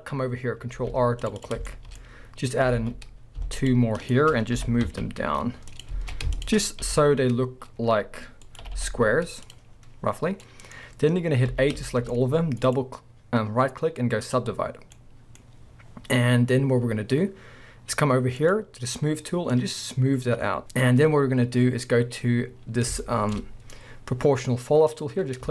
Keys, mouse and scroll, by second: 0.7 ctrl+r, 1.5 click, 1.7 shift+middle click, 2.8 alt+a, 3.6 alt+shift+click, 4.0 alt+shift+click, 4.6 g, 5.8 click, 6.0 alt+a, 6.4 alt+shift+click, 6.8 g, 8.6 right click, 8.6 g, 9.5 click, 9.7-10.4 scroll down 2, 10.4-10.8 middle drag, 11.5 a, 12.1-12.6 middle drag, 12.1-12.6 scroll up 2, 12.6-15.0 right drag, 14.7 scroll down 2, 15.0-18.4 middle drag, 18.4-19.6 drag, 20.6-23.0 scroll up 1, 23.0-24.9 shift+middle drag, 24.9 click.